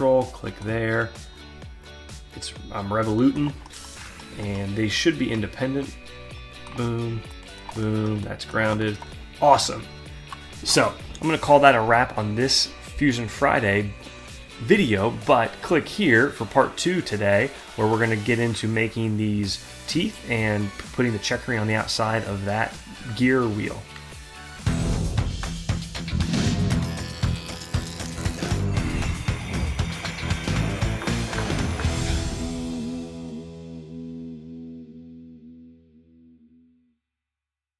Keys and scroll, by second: 9.2 alt+Tab, 16.8 alt+Tab.